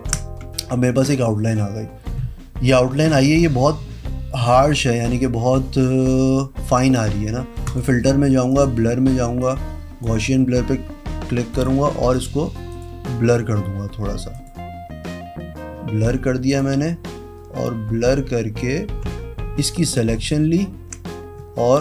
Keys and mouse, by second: 0.6 v, 2.9 click, 3.2 click, 7.6 click, 8.5 click, 9.4 click, 16.5 click, 19.8 ctrl+click.